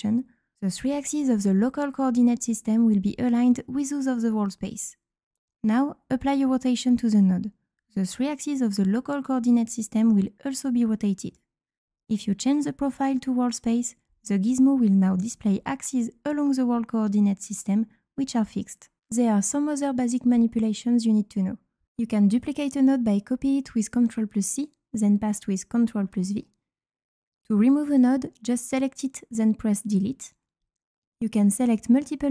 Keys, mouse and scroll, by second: 6.2 click, 13.4 click, 14.2 click, 23.5 click, 27.2-28.0 drag, 29.8 click.